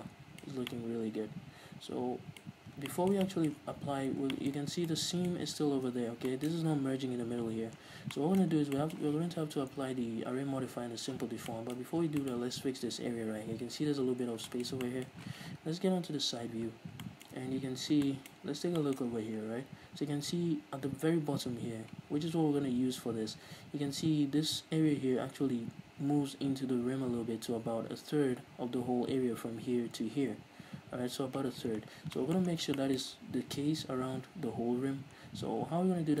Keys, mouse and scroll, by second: 0.7 scroll down 1, 2.7-3.2 scroll up 2, 4.8-5.2 scroll up 2, 6.2-6.6 scroll up 2, 7.9-9.0 scroll down 4, 12.1-12.6 scroll up 1, 14.5 scroll down 1, 16.1 KP_3, 16.7-17.2 scroll up 1, 17.7-18.0 scroll up 1, 18.4-36.2 middle drag, 18.6-19.0 scroll up 1, 21.1-21.8 scroll down 2, 21.8-23.6 scroll up 2, 23.6-27.8 scroll up 1, 27.8 scroll up 1, 31.8-33.1 scroll down 4, 35.5-36.2 scroll down 2.